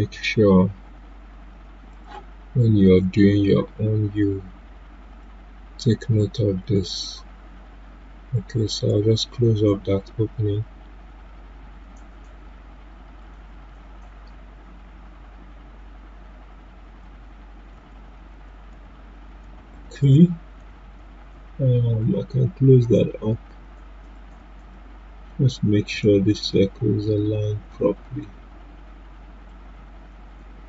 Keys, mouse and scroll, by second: 1.9 click, 5.2-11.3 drag, 17.0 ctrl+Num_Lock, 17.7 ctrl+z, 21.8-30.6 drag.